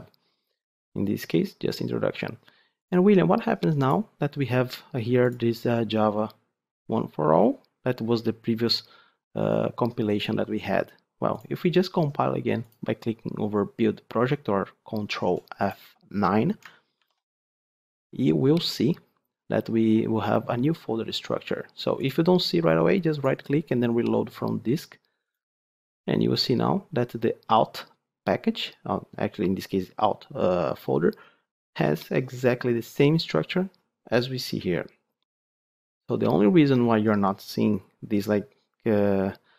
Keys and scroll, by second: 16.9 ctrl+F9.